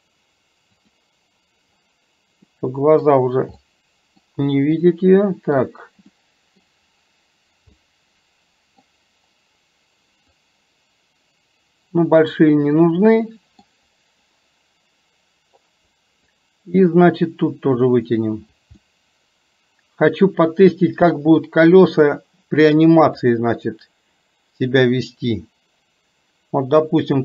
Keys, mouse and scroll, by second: 2.6 middle click, 3.6 middle click, 5.0 middle click, 6.2 middle click, 7.8 middle click, 10.4-12.5 drag, 12.9 middle click, 16.4-18.7 drag, 18.9-22.1 middle drag, 23.2-24.7 drag, 25.3-27.2 drag.